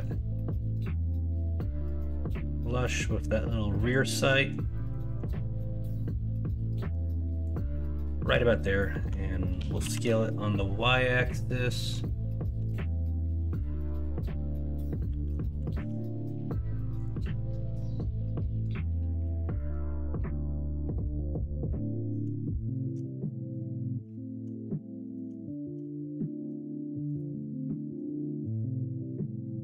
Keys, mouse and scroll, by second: 4.1 middle click, 4.7 middle click, 7.8 middle click, 10.1 s, 12.0 middle click, 14.7 middle click, 15.7 ctrl+r, 19.0 middle click, 19.5-21.3 middle drag, 21.7 middle click, 22.5 shift+middle click, 23.1 middle click, 23.5-25.1 middle drag, 25.5 shift+middle click, 26.3 middle click, 27.7 middle click.